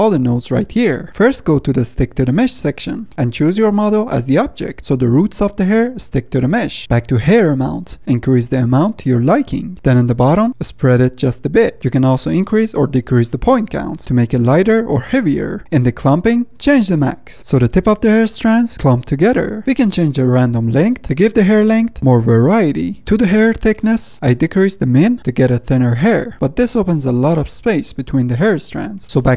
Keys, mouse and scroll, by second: 0.0-0.3 scroll down 2, 0.3-2.7 middle drag, 2.7-3.0 scroll down 2, 3.0-4.2 middle drag, 4.2-6.8 drag, 6.8-7.9 middle drag, 7.9 scroll up 1, 8.0-9.7 drag, 9.7 middle click, 10.5-12.0 drag, 12.2-14.3 middle drag, 14.3-15.6 drag, 15.6 middle click, 16.5-19.0 drag, 19.0-20.7 middle drag, 20.7-22.2 drag, 23.0-24.1 middle drag, 24.1 scroll down 1, 24.3 scroll up 1, 24.5 middle click, 25.2-26.5 drag, 26.5-29.1 middle drag, 29.1-29.3 drag.